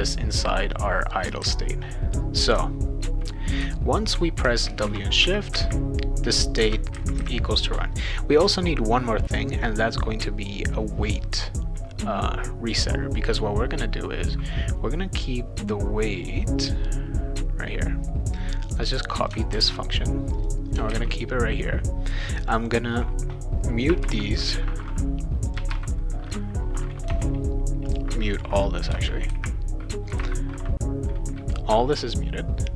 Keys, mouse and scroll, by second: 17.8-19.3 drag, 19.5 ctrl+c, 20.4 click, 20.9 ctrl+v, 22.5 click, 25.4 click, 27.1 BackSpace, 27.9 click, 28.9 Return.